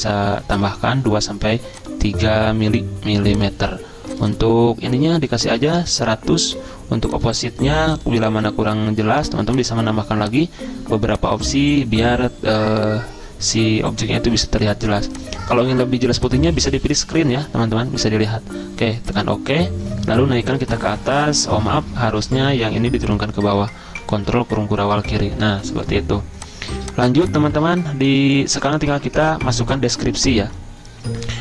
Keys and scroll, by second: 5.4-6.4 typing, 20.7 ctrl+], 24.0 ctrl+[, 25.5 ctrl+], 26.7 z, 28.1 z.